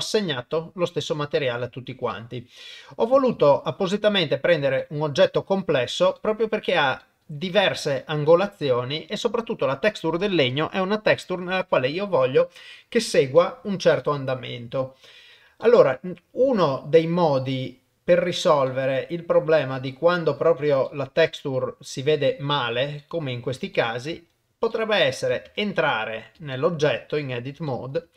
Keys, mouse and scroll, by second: 2.1 middle click, 3.0 click, 3.4 shift+middle click, 3.9 middle click, 4.8 shift+middle click, 6.2 middle click, 7.0 shift+middle click, 8.0 middle click, 13.4 middle click, 14.0 shift+middle click, 15.6 shift+middle click, 16.7 shift+middle click, 18.3 click, 18.7 middle click, 19.9 shift+middle click, 20.9 middle click, 23.0 middle click, 23.7 shift+middle click, 24.7 middle click, 25.5 Tab, 26.5 shift+middle click, 27.7 shift+middle click.